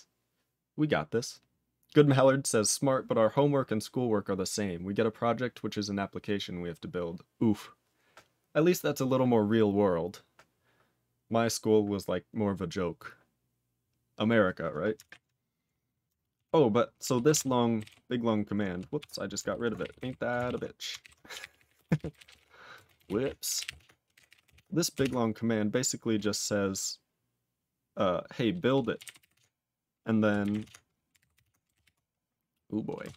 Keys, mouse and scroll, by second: 15.0 ctrl+e, 16.3 ctrl+a, 17.0 ctrl+e, 17.2 ctrl+space, 17.3 ctrl+a, 17.7 ctrl+g, 17.8 ctrl+e, 18.9 F5, 19.9 alt+p, 20.4 ctrl+a, 21.0 ctrl+k, 21.0-24.9 typing, 25.0 Tab, 28.7-33.1 typing.